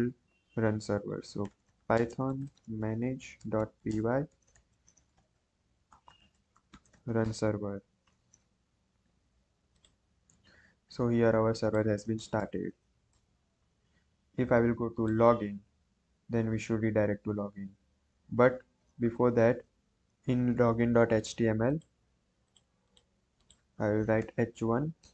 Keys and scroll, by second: 0.9-7.5 typing, 24.2-25.1 typing, 24.9 Return.